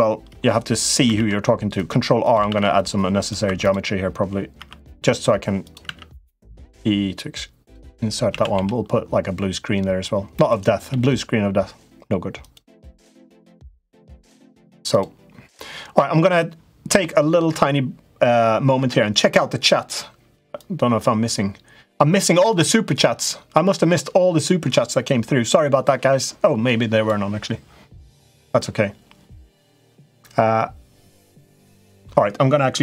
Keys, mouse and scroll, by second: 0.9 ctrl+r, 2.2 ctrl+r, 3.2 3, 3.3 click, 4.3 i, 5.6 e, 8.0 a, 8.3 g, 10.6 g, 12.5 g, 18.5 Tab.